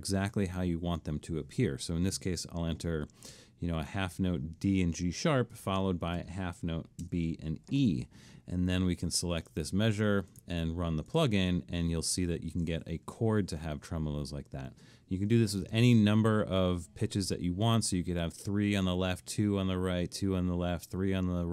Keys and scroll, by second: 3.3 6, 7.0 6, 9.0 Escape.